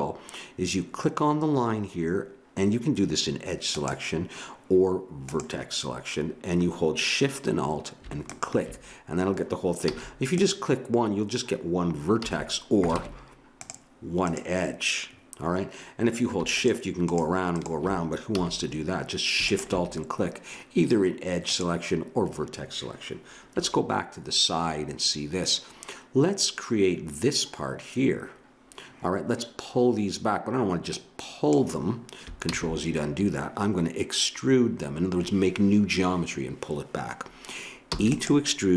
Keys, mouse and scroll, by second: 3.7-7.3 drag, 9.8 a, 12.2 a, 13.0 ctrl+Tab, 16.5-21.5 drag, 18.4 a, 23.5 KP_3, 30.9-32.6 drag, 32.5 ctrl+z, 37.9 e.